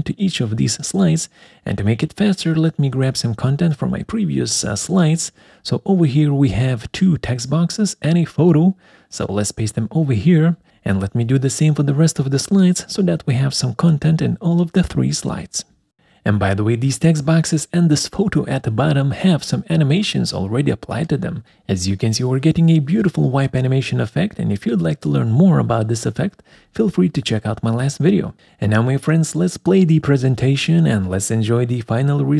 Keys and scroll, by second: 5.0 ctrl+c, 8.4 ctrl+v, 12.0 ctrl+c, 12.9 ctrl+v, 14.9 ctrl+c, 15.7 ctrl+v.